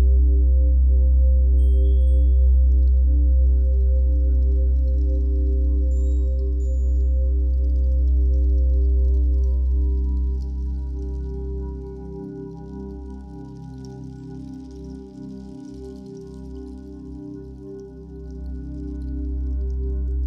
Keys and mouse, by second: 0.0 click, 2.9-5.4 drag, 6.2 click, 7.7 click, 8.2 click, 10.6-12.0 typing, 16.2 typing, 17.8 typing, 19.9 click.